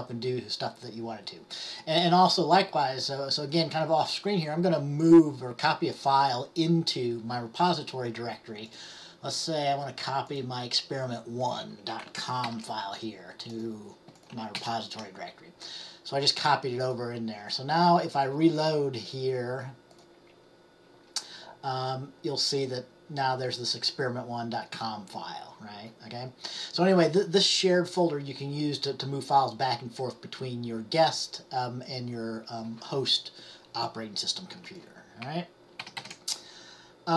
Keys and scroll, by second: 12.5 ctrl+c, 14.7 ctrl+v, 35.9 ctrl+x, 36.1 ctrl+c.